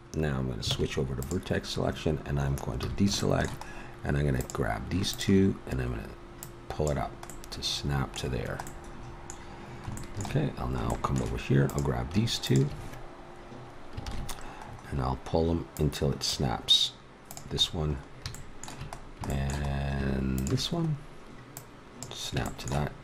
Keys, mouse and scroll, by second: 0.7 ctrl+Tab, 2.7 a, 4.3-6.0 right drag, 7.3-8.7 middle drag, 8.7 middle click, 9.1 middle click, 11.6-14.0 right drag, 14.0 ctrl+KP_3, 15.7-18.3 drag, 18.3 middle click, 20.3-21.5 middle drag.